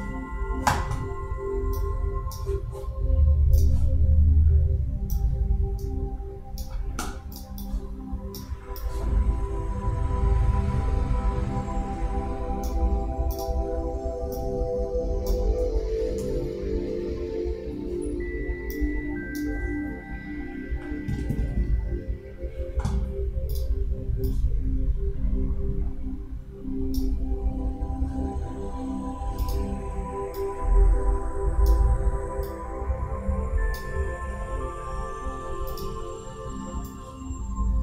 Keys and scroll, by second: 15.7 super+=.